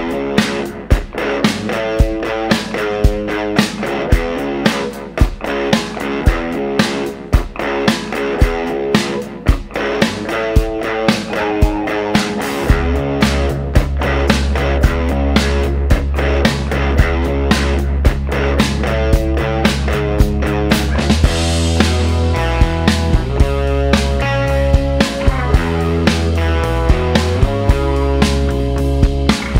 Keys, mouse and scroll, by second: 1.8 click, 3.3 click, 4.9 click, 6.8 click, 7.7 click, 8.3 shift+o, 10.7 click, 12.5 click, 14.3 click, 14.8 shift+o, 17.4 click, 19.3 click, 20.4 click, 20.8 right click, 22.2 click, 23.2 click, 23.7 shift+o, 25.7 click, 26.7 click, 27.3 shift+o.